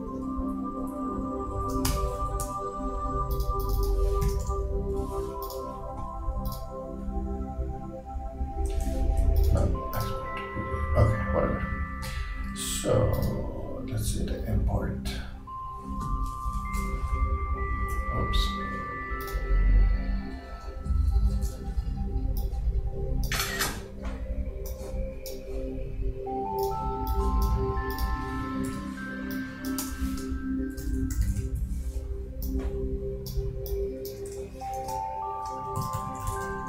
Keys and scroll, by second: 0.1 shift+Right, 0.4 shift+Down, 1.9 shift+BackSpace, 4.2 shift+q, 16.6 shift+super+5, 21.3 shift+super+4, 28.7 super+d, 30.2 shift+Return, 30.5-31.4 typing, 34.6 shift+Return, 35.8 shift+a.